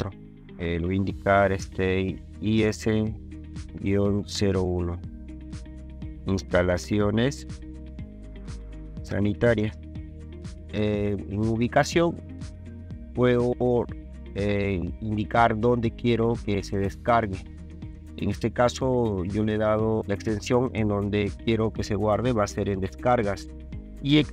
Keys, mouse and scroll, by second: 2.5 s, 4.3 KP_0, 4.6 KP_1, 5.8-10.6 typing.